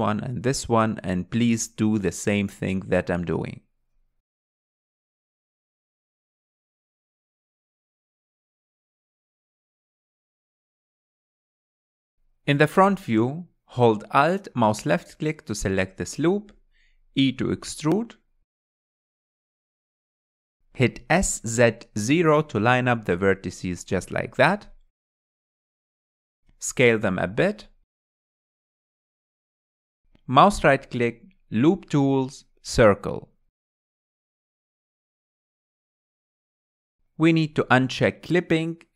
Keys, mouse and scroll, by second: 0.0 click, 1.4 click, 3.3 alt+z, 3.7-4.1 scroll down 2, 4.1-6.1 middle drag, 6.1 click, 6.8-7.8 middle drag, 7.8 click, 9.2 g, 10.0-11.0 middle drag, 11.0-11.3 scroll down 4, 11.3 Tab, 11.5-12.1 middle drag, 12.1 KP_1, 12.4 scroll up 2, 13.3-13.8 scroll up 2, 14.1 click, 14.6 Tab, 17.2 alt+click, 19.6 e, 23.4 s, 27.9 click, 28.9 s, 30.6-32.5 middle drag, 32.5-35.5 right drag, 36.4 KP_1, 37.9 click.